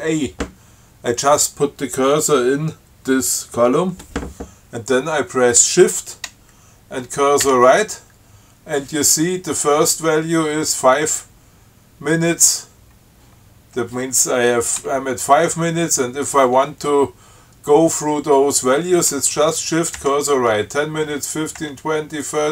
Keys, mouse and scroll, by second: 7.7 shift+Right, 20.2 shift+Right.